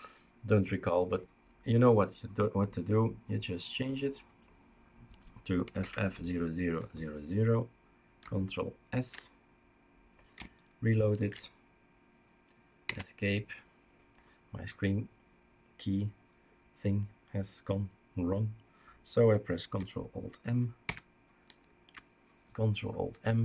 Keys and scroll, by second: 5.6 typing, 8.9 ctrl+s, 11.3 ctrl+s, 11.3 super+r, 12.8 Escape, 20.9 ctrl+alt+m.